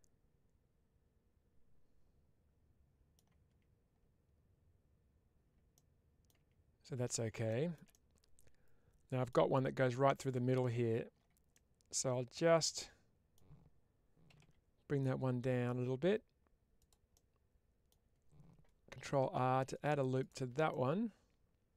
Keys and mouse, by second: 5.6 middle click, 7.8-9.1 middle drag, 11.4-13.3 middle drag, 16.7 click, 17.0-18.4 middle drag, 20.1 click, 20.6-21.7 middle drag.